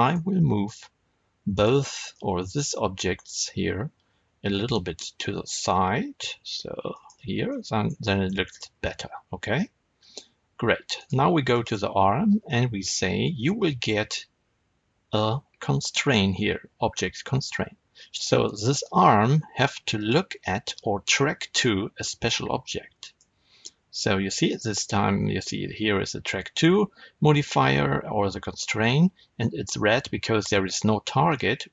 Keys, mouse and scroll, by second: 0.0 click, 0.6 shift+click, 1.4 shift+click, 2.0-10.9 middle drag, 4.6 g, 7.0 click, 8.3 scroll up 2, 10.9 click, 11.4-19.9 shift+middle drag, 19.9-31.7 drag.